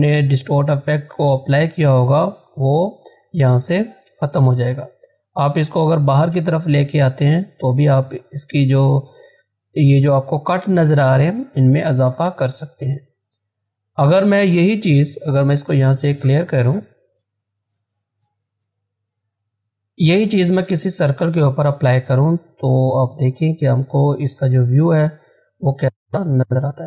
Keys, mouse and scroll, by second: 0.9-1.4 scroll down 1, 2.2-2.8 scroll up 1, 4.6-9.6 drag, 11.8-12.4 scroll down 1, 13.6 click, 17.3 click, 19.9-21.5 scroll down 1, 21.5-26.8 drag.